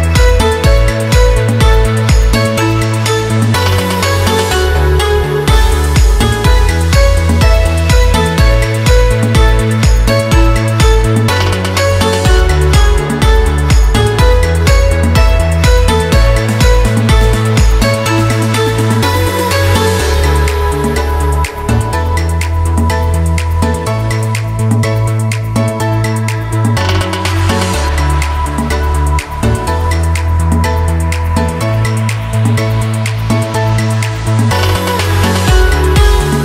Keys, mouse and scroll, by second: 1.5 shift+5, 3.3 click, 4.0-4.5 scroll up 2, 5.1-10.9 drag, 10.9 ctrl+z, 12.4-18.5 drag, 20.3 scroll down 1, 21.3 ctrl+t, 22.5 click, 23.6 Return, 24.3 click, 24.6-26.7 drag, 26.7 ctrl+t, 27.5 click, 28.6 Return, 30.5-32.3 drag, 32.2 Up, 34.7 click.